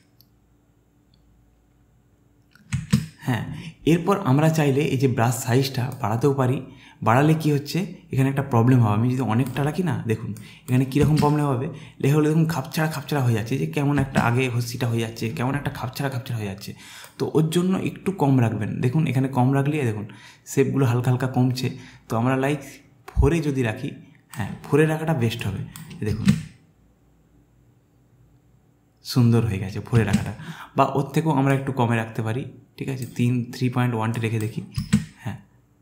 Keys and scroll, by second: 3.0 space, 11.1 space, 14.2 space, 26.2 space, 30.2 space, 34.8 space.